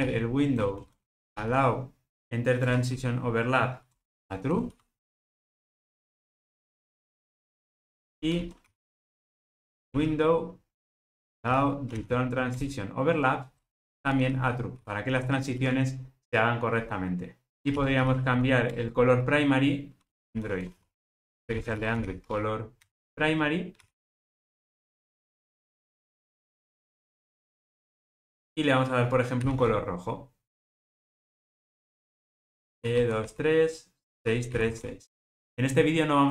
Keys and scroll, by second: 1.2 Return, 9.1 Return, 17.5 super+z, 18.7 super+z, 25.3 Return.